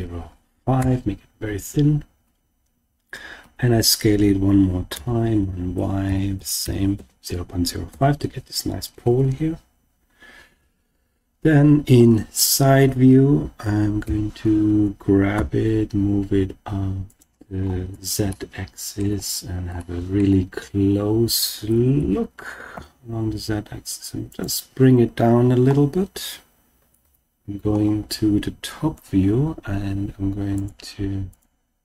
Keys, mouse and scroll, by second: 0.7 Return, 3.4 s, 4.9 y, 6.0 0, 6.6 0, 6.6 ., 6.9 5, 7.8 Return, 8.8-9.7 scroll up 4, 10.5 KP_1, 14.0 g, 15.3 z, 17.1 click, 17.5-18.0 scroll up 2, 18.1 shift+scroll up 1, 18.2-19.0 shift+middle drag, 19.2-19.7 scroll up 3, 19.7-20.3 shift+middle drag, 20.4-20.9 scroll up 1, 20.9-21.2 scroll up 1, 21.9 g, 22.7 z, 24.2 click, 25.3-25.7 scroll down 2, 26.9 scroll down 1, 26.9 KP_7, 27.7-28.2 scroll down 2, 30.5 click, 31.3 click.